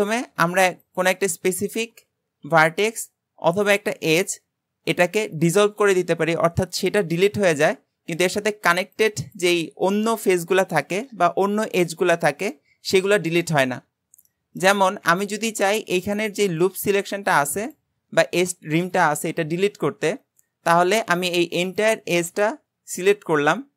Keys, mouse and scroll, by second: 0.9 alt+shift+click, 1.5-2.5 shift+middle drag, 2.5 x, 12.4-13.6 scroll down 2, 14.1 scroll down 1, 14.3-20.1 shift+middle drag, 20.5-21.6 scroll up 1, 21.6 alt+shift+click.